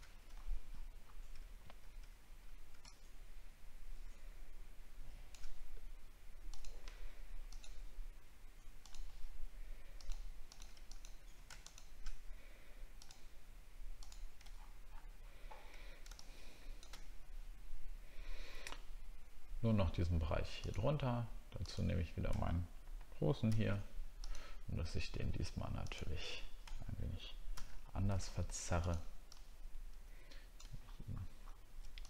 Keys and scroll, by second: 0.4 alt+scroll up 1, 14.6 alt+scroll down 1, 30.8 alt+scroll up 1, 31.3 alt+scroll up 1.